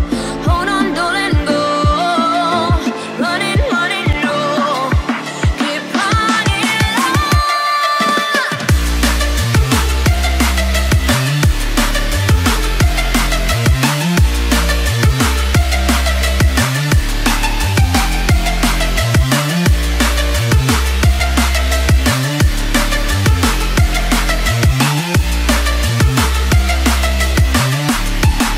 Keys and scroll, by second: 2.0 ctrl+a, 5.5 ctrl+d, 7.6 ctrl+s.